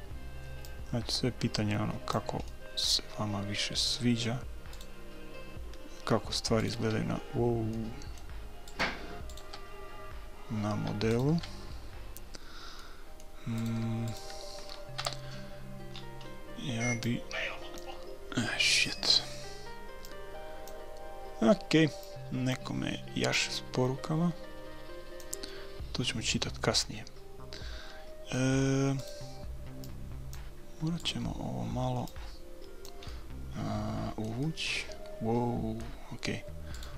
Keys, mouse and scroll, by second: 2.5-4.6 middle drag, 4.8-8.5 right drag, 8.5 middle click, 8.7-11.0 right drag, 11.2-13.1 right drag, 12.8 middle click, 13.6-14.6 drag, 13.6-15.9 right drag, 15.0 KP_3, 15.9-17.0 middle drag, 17.0-18.8 drag, 20.0-21.9 drag, 22.0-25.2 drag, 25.5-27.3 middle drag, 29.0-30.3 right drag, 29.8 click, 30.9 click, 31.6 right click, 33.0 click, 33.8-36.4 middle drag, 36.7-36.9 right drag.